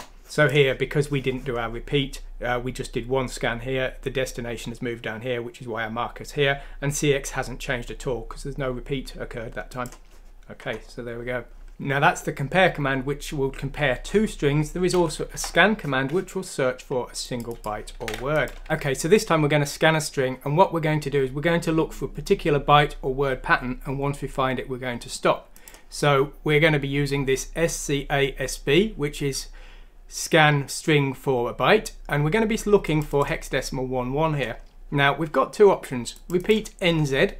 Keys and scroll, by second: 15.3 BackSpace, 18.0 ctrl+c, 18.6 ctrl+f.